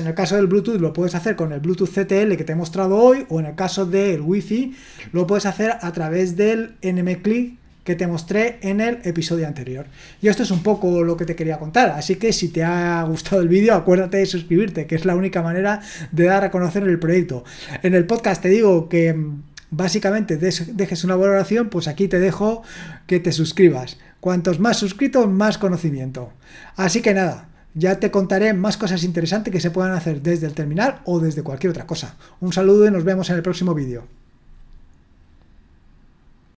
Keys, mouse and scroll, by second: 36.4 click.